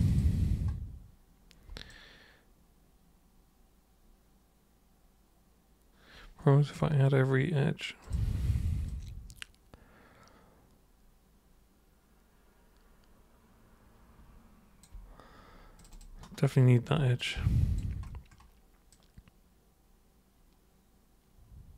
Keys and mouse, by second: 1.9-6.7 alt+drag, 8.0 click, 8.8-14.8 alt+drag, 15.8 super+click, 17.2 alt+super+click, 18.9-21.7 alt+super+drag.